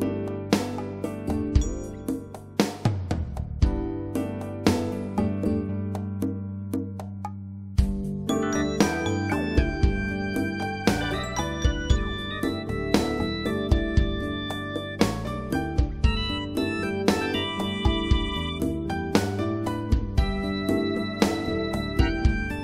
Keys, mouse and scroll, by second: 4.6 click, 9.6 click, 13.5 click, 19.5 click, 21.4 click.